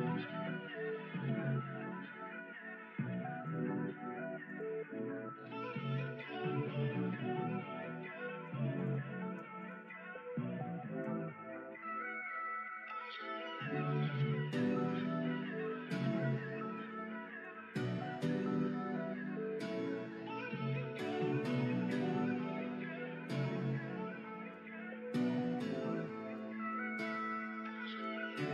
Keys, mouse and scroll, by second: 3.6 e, 4.6 e, 6.1 middle click, 6.9 click, 8.7 shift+click, 9.5 shift+click, 10.9 ctrl+f, 14.9 ctrl+e, 16.2 middle click, 16.7 click, 17.0 middle click, 17.6 ctrl+r, 19.3 middle click, 20.5 middle click, 21.1-23.3 middle drag, 23.7 middle click, 24.3 middle click, 25.5 click, 26.2 click, 27.9 g.